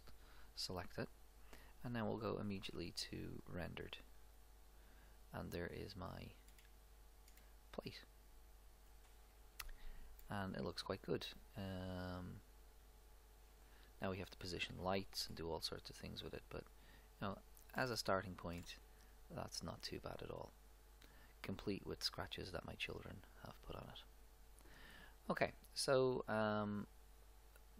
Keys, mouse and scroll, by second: 2.0 click, 3.4 click, 4.5-6.4 middle drag, 6.6 middle click, 23.7 middle click, 26.2 click, 26.6 click, 26.8 click.